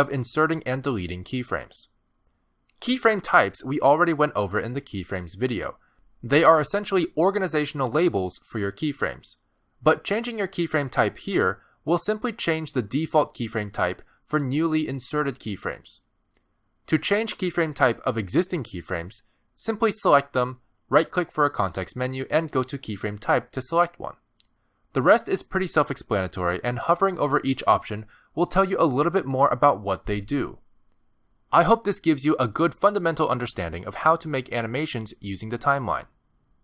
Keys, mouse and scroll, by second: 14.3 click, 15.4 g, 15.9 click, 18.6 click, 20.6 click, 22.0 right click, 27.4 click.